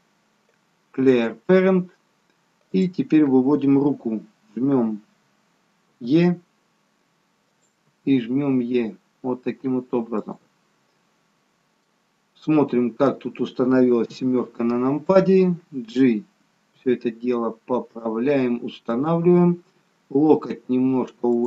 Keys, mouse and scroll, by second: 5.8 e, 11.8 middle click, 14.1 KP_7, 16.8 g, 20.2 click, 20.5 g.